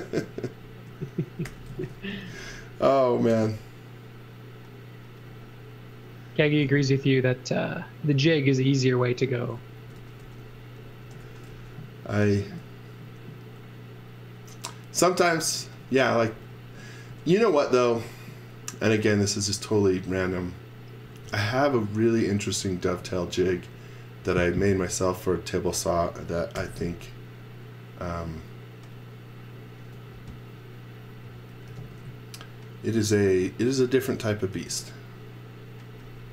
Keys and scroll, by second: 1.2-3.3 typing, 9.7-12.4 typing, 15.3-17.4 typing, 21.0 x, 21.3 v, 26.5 m, 29.7 space, 31.6 n, 34.5 space.